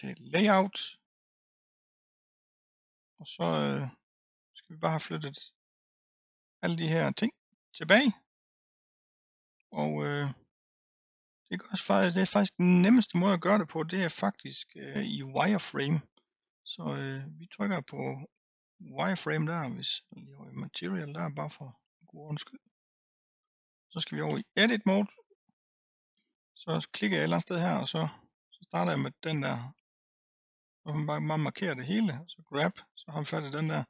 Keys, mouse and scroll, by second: 3.3-4.8 scroll up 6, 4.8-9.9 middle drag, 9.9-10.6 scroll up 1, 10.6-12.3 scroll down 1, 18.8 click, 20.6 click, 23.2-24.3 scroll up 1, 24.3 Tab, 26.4 click, 28.1-29.3 middle drag, 29.3 click, 32.6 g.